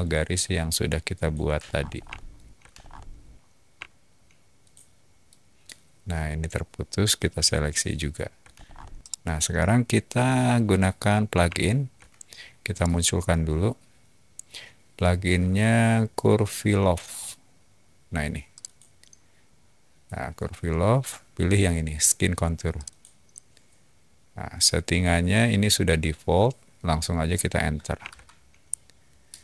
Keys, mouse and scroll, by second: 1.1 shift+click, 1.6 shift+middle click, 1.9 shift+middle drag, 2.2 shift+middle click, 2.7 middle drag, 4.5 shift+click, 5.1-5.5 shift+middle drag, 7.2 shift+click, 7.9-8.3 shift+middle drag, 8.3 shift+middle click, 8.5 middle click, 9.0-11.8 middle drag, 12.7 shift+right click, 18.5 click, 22.7 click, 28.0 Return.